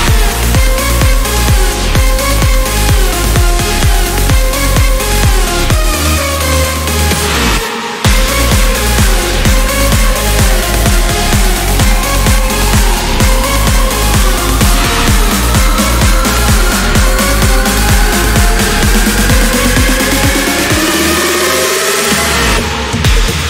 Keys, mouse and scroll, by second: 2.3 click, 3.8 click, 4.6 click, 6.3 click, 9.9 click, 12.7 click, 13.9 click, 16.8 click, 19.1 click, 19.9 click, 20.5 click, 21.2 click, 22.3 click.